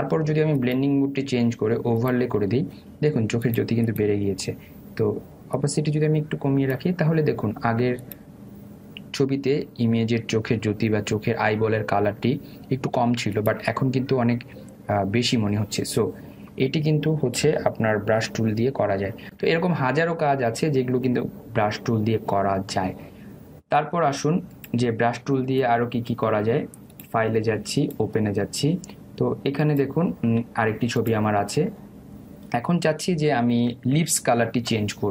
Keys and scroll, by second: 19.5 ctrl+0.